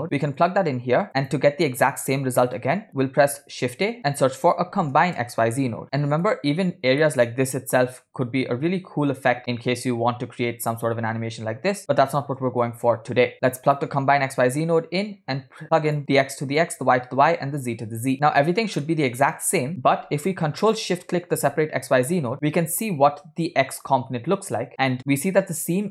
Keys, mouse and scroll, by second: 1.1 click, 1.9 click, 3.0 click, 3.6 shift+a, 5.8 BackSpace, 6.9 scroll down 2, 7.1-8.2 middle drag, 9.3-13.2 drag, 13.3-14.1 drag, 15.2-17.7 drag, 18.2 click, 18.3 scroll up 2, 18.9 middle click, 20.8 ctrl+shift+click.